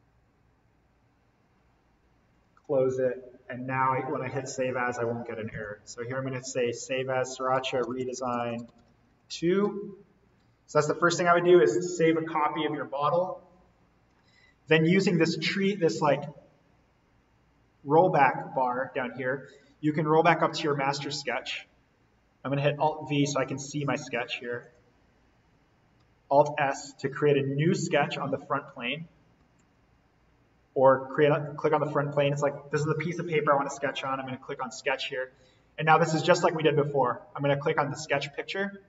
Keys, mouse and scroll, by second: 2.2 click, 7.5-9.1 typing, 10.2 click, 15.9-22.3 drag, 22.6 click, 22.8 alt+v, 24.6 click, 26.3 s, 29.3 alt+s, 31.3 click, 34.8 click, 37.6 click.